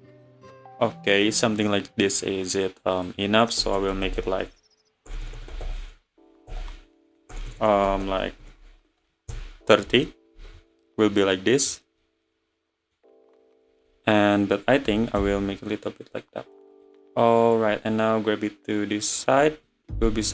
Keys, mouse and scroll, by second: 1.0 scroll down 1, 1.0-2.6 middle drag, 2.6-3.8 drag, 3.8 BackSpace, 4.2 0, 5.2 BackSpace, 5.4 BackSpace, 8.0 0, 10.4 `, 10.9 scroll down 2, 11.2-13.7 middle drag, 13.7 `, 14.9 s, 17.9 click, 19.7-20.3 middle drag.